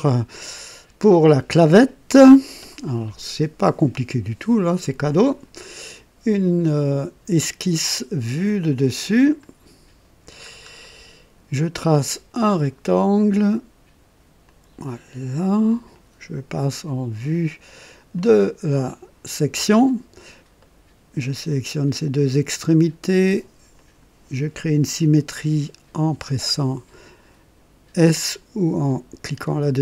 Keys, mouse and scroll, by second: 1.7-2.5 drag, 5.1 click, 8.5 click, 9.3 click, 10.1 middle click, 10.4 scroll up 2, 10.8 right click, 12.5 click, 14.4 click, 15.7 click, 18.2 click, 20.6 right click, 21.7 click, 22.7 click, 23.8 click, 29.5 s.